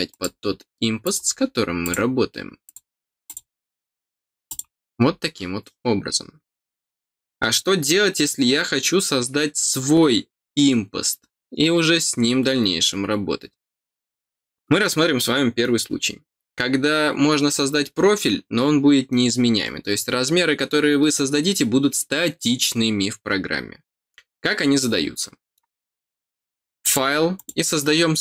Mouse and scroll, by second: 0.1 click, 1.0 click, 1.8 click, 2.6 click, 3.2 click, 4.4 click, 26.8 click, 27.3 click.